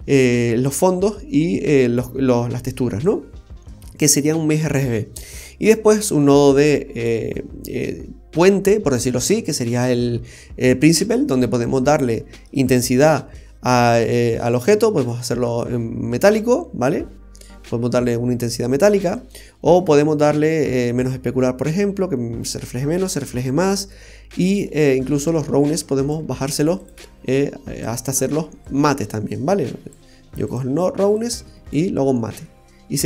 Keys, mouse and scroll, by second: 4.8-5.7 scroll down 6, 5.7 middle click, 11.4-12.2 scroll up 5, 12.2 middle click, 12.7-13.0 scroll up 2, 14.1 click, 16.7 middle click, 17.2-17.9 scroll down 2, 17.6 middle click, 21.0 click, 25.3 click, 27.3 click, 28.6 click, 31.1 click, 32.1 scroll up 1.